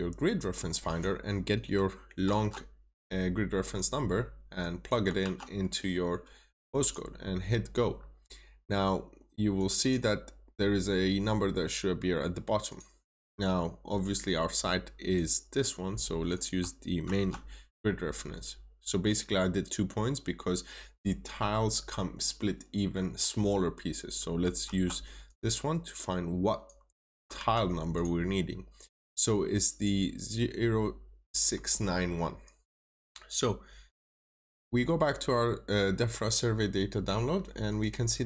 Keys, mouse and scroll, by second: 2.1 ctrl+c, 2.8 typing, 3.5 click, 5.1 typing, 6.7 click, 7.8 scroll down 1, 9.5 click, 11.0 scroll up 1, 12.6 click, 16.9 ctrl+c, 18.8 typing, 24.6 typing, 25.2 click, 27.3 typing, 27.8 click, 28.4 scroll down 1, 29.5 click.